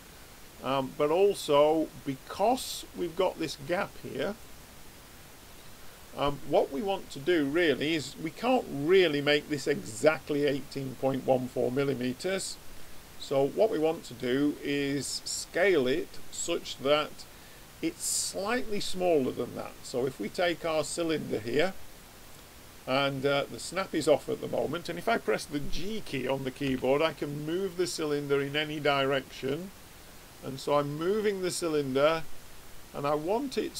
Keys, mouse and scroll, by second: 4.3-6.3 middle drag, 12.4 click, 26.6 g.